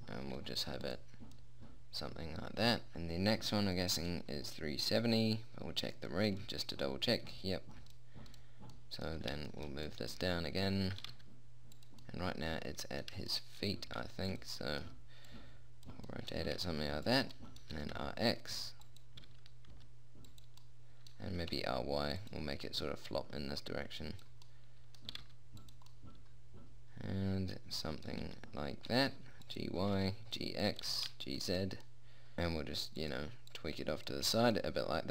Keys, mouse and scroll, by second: 0.7 g, 1.6-2.9 drag, 3.4 click, 6.4 right click, 9.2-10.4 middle drag, 11.4 g, 14.4 r, 16.9 r, 18.2 r, 19.8 r, 21.0 middle click, 21.8 r, 22.6 middle click, 23.5-24.9 drag, 25.2 middle click, 25.6 g, 28.6 g, 30.2 g, 31.2 g, 32.4 r, 34.0-35.1 drag.